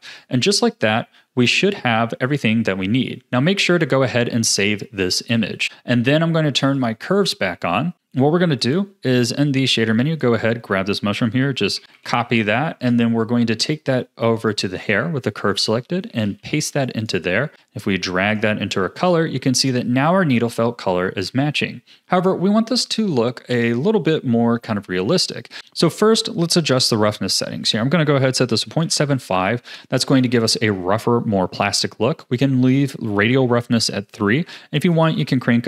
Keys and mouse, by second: 0.0 Tab, 8.2 click, 8.6 click, 11.7 ctrl+c, 11.8 ctrl+c, 11.9 ctrl+c, 12.1 ctrl+c, 15.5 click, 16.0 click, 16.2 ctrl+v, 16.8 click, 17.5-18.3 drag, 20.6 a, 25.8 click, 27.6-29.1 drag, 34.3 click, 35.0-35.6 drag.